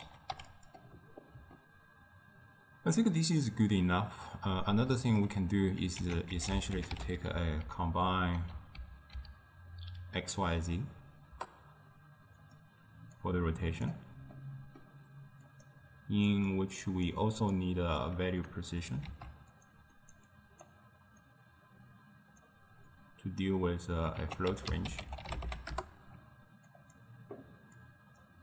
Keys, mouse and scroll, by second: 1.5 scroll down 2, 1.6-4.8 ctrl+middle drag, 4.8 scroll down 2, 4.9-6.0 ctrl+middle drag, 6.0 ctrl+a, 7.6 Down, 13.3-14.4 drag, 14.4-15.6 middle drag, 15.6 click, 16.4 click, 16.8-17.6 drag, 18.6 click, 19.1 shift+d, 20.1-24.3 drag, 24.3 ctrl+a, 27.8-28.4 drag.